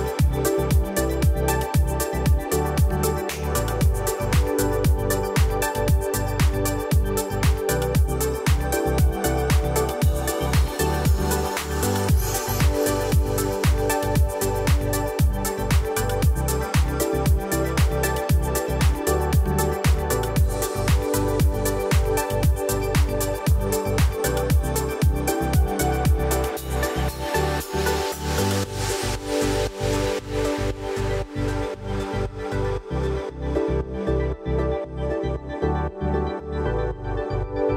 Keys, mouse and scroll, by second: 0.5-3.7 drag, 4.9-5.3 alt+scroll up 1, 5.7 click, 7.8 Delete, 9.4-10.0 drag, 13.9 BackSpace, 14.9-15.3 click, 15.5-18.9 typing, 16.8 click, 17.8 click, 18.7 click, 19.6 click, 21.0 BackSpace, 21.9 click, 23.3 alt+scroll up 1, 24.1-24.7 click, 30.7-31.3 alt+scroll down 1, 32.2 alt+scroll down 1, 32.6 click, 33.7 F7, 34.3 alt+scroll up 1, 34.5 alt+scroll down 1, 34.7 alt+scroll up 1, 35.3 click, 37.5 BackSpace.